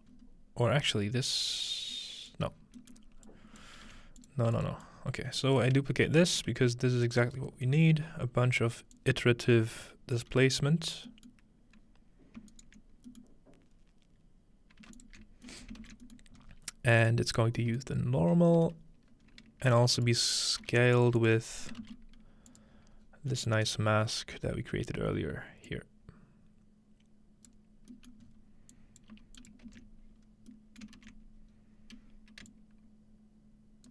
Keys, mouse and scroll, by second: 0.1-1.9 scroll up 2, 1.9-3.9 drag, 2.6-3.9 scroll down 2, 3.9 g, 4.2 click, 4.6 click, 4.9 click, 6.2 typing, 7.1 click, 7.3-8.6 scroll up 1, 7.9-9.6 middle drag, 8.6-9.6 scroll up 1, 9.0-10.2 drag, 10.8-11.1 scroll down 2, 11.6 scroll down 2, 12.5 ctrl+right click, 14.2 middle click, 15.0-16.2 alt+shift+drag, 15.7 ctrl+middle click, 15.9 typing, 16.4-18.3 scroll up 1, 18.8-19.3 scroll down 1, 19.3-19.8 scroll up 1, 19.8-20.6 drag, 20.6 g, 21.0 click, 21.2-24.3 drag, 21.8 typing, 22.7-24.9 scroll down 1, 23.5-24.8 middle drag, 25.7-27.5 drag, 27.9-29.0 middle drag, 28.3-30.4 scroll up 1, 28.7-30.8 drag, 29.1 g, 29.7 ctrl+space, 30.4-30.8 scroll down 1, 30.9-32.2 ctrl+middle drag, 31.0 ctrl+s, 31.5-32.0 scroll up 2, 32.5-33.3 scroll up 1, 32.5-33.9 shift+drag.